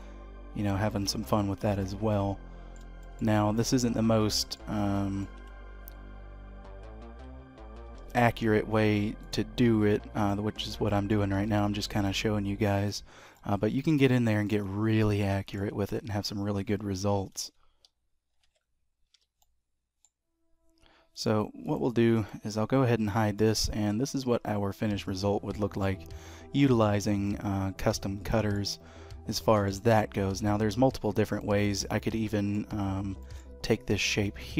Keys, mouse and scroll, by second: 2.1 middle click, 3.0 shift+middle click, 3.3 middle click, 4.9 shift+middle click, 5.4 Tab, 8.0 s, 10.1 click, 10.9 shift+middle click, 11.3 g, 13.0-13.3 scroll down 2, 13.3 middle click, 14.1-14.4 scroll up 4, 14.4 middle click, 16.7-17.2 scroll down 1, 17.2 scroll down 2, 17.3 Tab, 18.4 Tab, 19.1 h, 19.4 middle click, 21.1 click, 21.6 click, 22.1 click, 23.0 h, 23.3 middle click, 26.3-26.9 scroll down 2, 26.9-27.3 scroll up 3, 27.2 middle click, 29.1 scroll down 1, 29.4 shift+middle click, 30.9-32.1 scroll down 2, 31.4 middle click, 32.9 scroll up 1, 33.2 shift+middle click, 34.4 shift+middle click.